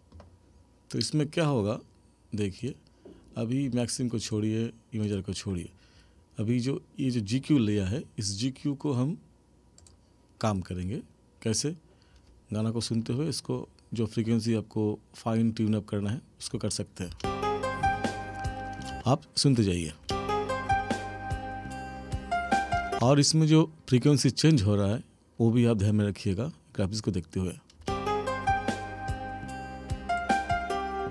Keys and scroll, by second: 17.1 space, 18.9 space, 22.9 space, 27.8 space.